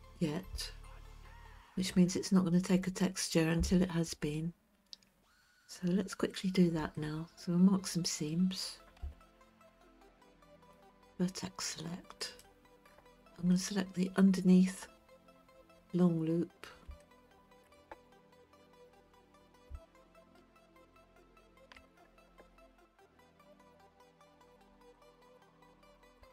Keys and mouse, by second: 7.0-8.4 middle drag, 9.0 Tab, 12.3 click, 13.5-16.7 middle drag, 17.0 shift+middle click, 21.0 alt+click, 22.6-24.5 middle drag, 25.1-26.1 shift+middle drag.